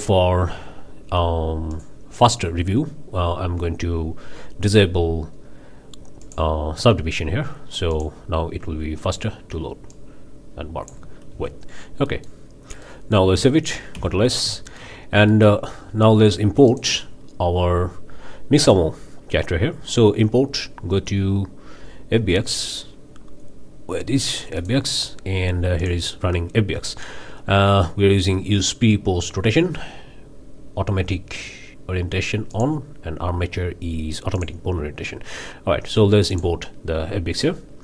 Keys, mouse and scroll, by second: 1.7-2.0 drag, 3.4-3.7 scroll down 2, 6.2 click, 7.9 drag, 8.6 Tab, 9.9-11.1 drag, 11.7 ctrl+z, 12.1 middle click, 12.9-13.4 middle drag, 14.0 ctrl+s, 14.3 ctrl+scroll down 3, 14.7 shift+middle click, 15.0 shift+scroll up 2, 15.3-15.7 shift+drag, 16.7-17.0 drag, 19.1-24.6 middle drag, 24.6 click, 25.8-26.1 drag, 27.1 scroll down 2, 32.5 drag, 32.9 scroll down 2, 34.3-34.6 drag, 36.3 click.